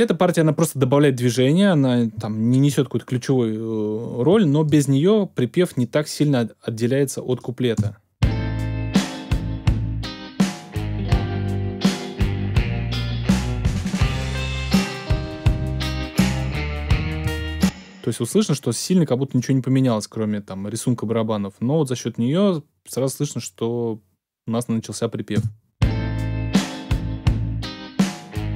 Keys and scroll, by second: 7.7 space, 17.2 space, 25.3 space.